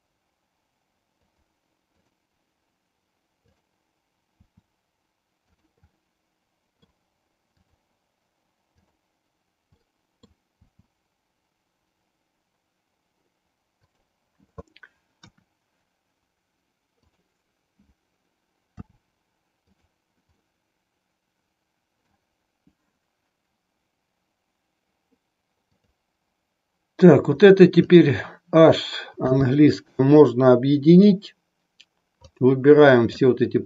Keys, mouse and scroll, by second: 2.0 click, 4.4 r, 5.9-6.9 middle drag, 7.6 click, 8.9 click, 9.9-10.5 middle drag, 10.8 r, 15.2 KP_1, 16.9 click, 18.6 r, 20.5-22.1 middle drag, 29.1 h, 30.0-31.2 middle drag, 32.3 click.